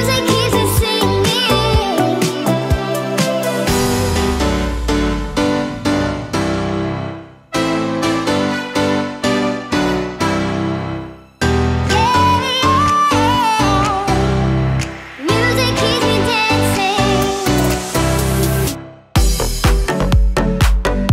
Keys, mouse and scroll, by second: 5.5 space, 8.5-11.5 drag, 11.6-13.1 middle drag, 14.4 shift+middle drag, 14.9-19.2 middle drag, 19.4-21.1 middle drag.